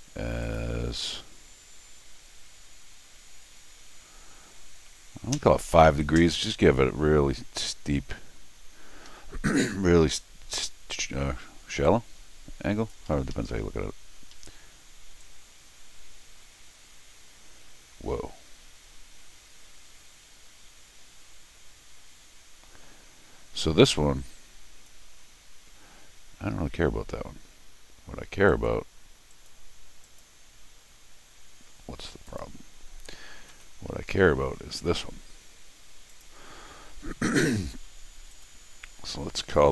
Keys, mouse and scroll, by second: 0.4 click, 7.7 middle click, 8.2 scroll down 2, 8.5 scroll up 2, 9.1 Escape, 11.8-12.9 drag, 13.1 Escape, 13.3 Escape, 14.3 Escape, 15.2-24.9 drag, 28.5 click, 29.3 click, 30.0 click, 32.3 click, 34.1 Escape, 34.7 d, 36.1 click, 37.6 click, 38.3 click.